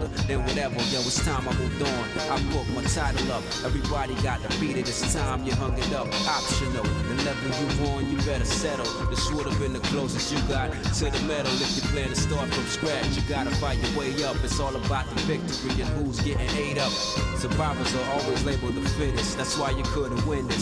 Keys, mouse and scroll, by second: 0.5 ctrl+shift+right click, 1.5 ctrl+shift+right click, 2.2 middle click, 2.7-3.2 scroll up 4, 5.0 g, 9.3 shift+middle click, 9.9-10.4 scroll down 3, 10.6 middle click, 11.1 shift+middle click, 11.8 middle click, 12.3 z, 13.2 middle click, 14.2 ctrl+Tab, 15.6 alt+shift+click, 16.4 click, 16.9 alt+shift+click, 18.1 alt+shift+click, 19.5 f, 20.1 shift+middle click.